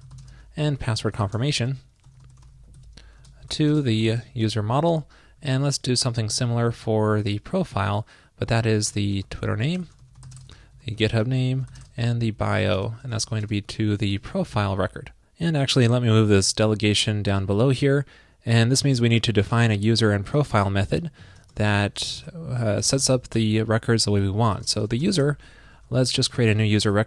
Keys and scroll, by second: 4.9 ctrl+shift+d, 5.5 super+Left, 5.7 alt+Right, 5.9 alt+Right, 6.5 Right, 16.6 super+x, 17.6 super+v.